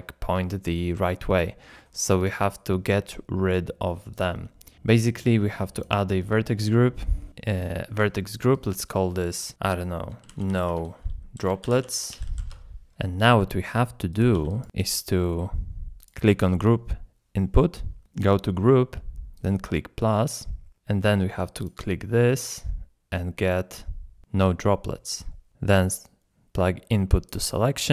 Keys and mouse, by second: 0.6 middle click, 2.2 click, 5.8 click, 8.0 click, 9.0-12.6 drag, 13.3 middle click, 14.1 click, 14.3 g, 15.2 middle click, 22.8-24.8 drag, 26.3-27.3 drag.